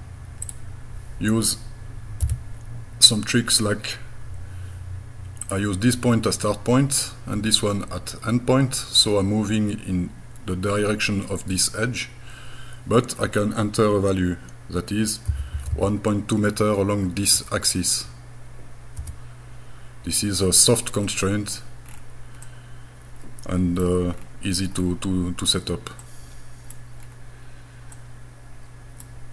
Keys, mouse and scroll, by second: 0.5 click, 2.2 g, 5.4 click, 15.3 KP_1, 15.6 KP_Decimal, 15.7 KP_2, 19.0 KP_Enter, 21.1 middle click, 21.9 scroll down 5, 22.5-23.8 middle drag, 24.2-24.6 scroll down 1, 24.7-25.0 scroll up 4, 25.5 scroll up 2, 26.0 middle click, 27.0 scroll down 2, 27.9-29.0 middle drag.